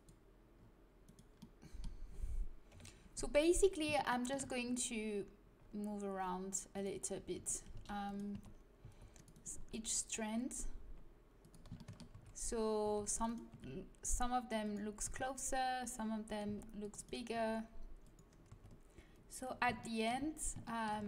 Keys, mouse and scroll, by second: 2.7 KP_1, 4.6 g, 7.3-9.5 typing, 8.7-10.6 right drag, 10.5 click, 10.5 middle click, 12.1 a, 12.8 c, 13.3-14.9 drag, 13.4 g, 15.0 a, 16.4 c, 17.0-18.2 drag, 17.3 g, 19.8 middle click.